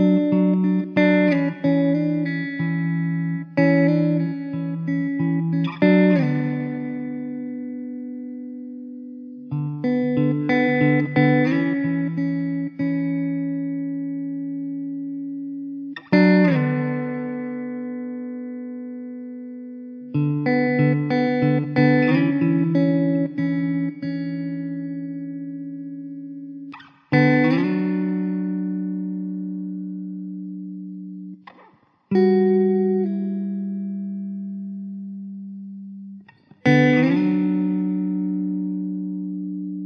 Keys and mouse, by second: 2.6 ctrl+z, 7.0 KP_2, 7.3 KP_Decimal, 7.5 KP_5, 7.8 Return, 10.9 w, 18.7 middle click, 20.4 alt+w, 21.1 middle click, 22.8 alt+w, 23.4 middle click, 24.8-26.3 typing, 28.4-29.2 typing, 32.4 e, 35.2 w.